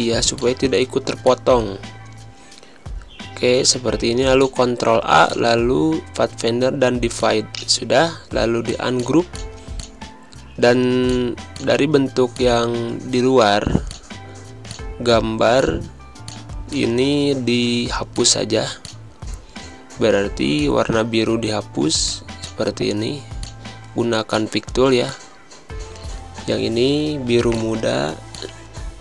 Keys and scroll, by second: 18.7 typing.